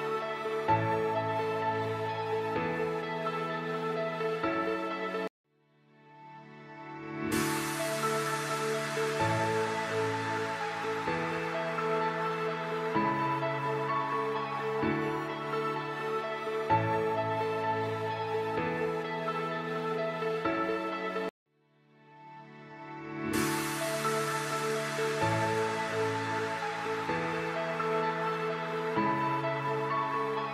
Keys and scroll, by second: 3.7 space, 8.4 space, 13.0 F2, 15.6 g, 22.2 space, 26.0 alt+c, 26.7 F4, 27.3 Escape.